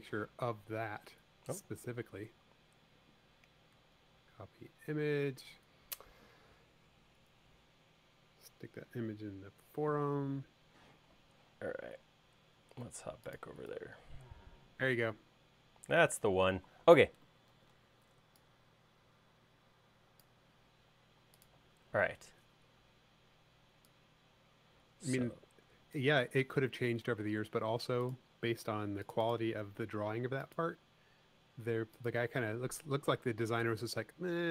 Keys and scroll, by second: 17.8 shift+super+4, 33.2 l.